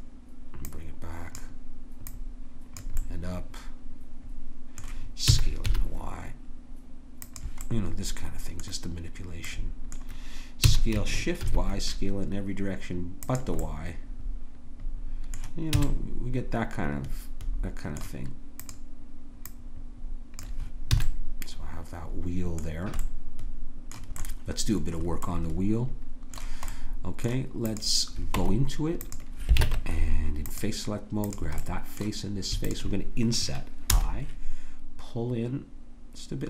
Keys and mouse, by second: 0.7-4.0 drag, 5.3 s, 10.6 s, 15.8 a, 15.9-17.8 middle drag, 18.6 middle click, 21.0 a, 27.6 click, 28.4 Tab, 29.6 ctrl+Tab, 31.2 click, 33.9 i.